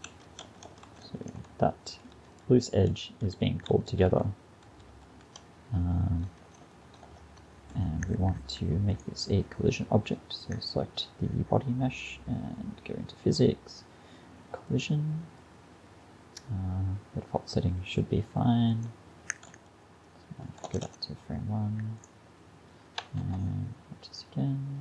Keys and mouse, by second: 0.1 Right, 0.5 Right, 0.7 Right, 0.9 Right, 1.1 Right, 1.3 Right, 1.6 Right, 1.9 Right, 2.2 Right, 2.5 Right, 3.0 Right, 3.3 Right, 3.8 Right, 3.9 Right, 4.1 Right, 4.7 Right, 4.9 Right, 5.1 Right, 5.4-6.5 Left, 6.7 Left, 6.9 Left, 7.1 Left, 7.4 Right, 7.6 Right, 14.7 click, 19.6-20.7 Left, 20.9 Left, 23.2 alt+a.